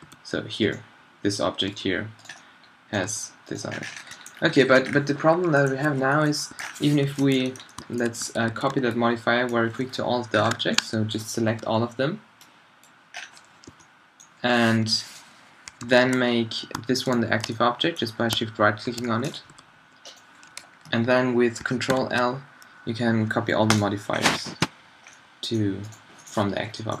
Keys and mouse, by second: 0.0 g, 1.7 g, 2.9-4.2 drag, 3.0 g, 4.3 drag, 4.9 middle click, 5.3 drag, 6.6 a, 7.0 z, 8.3 a, 8.5 a, 8.7 b, 11.5 b, 13.7 b, 14.8 z, 15.8 alt+z, 17.1-17.6 middle drag, 19.5 g, 21.9 ctrl+l, 24.1 middle click, 25.9-26.6 drag, 26.6-27.0 middle drag.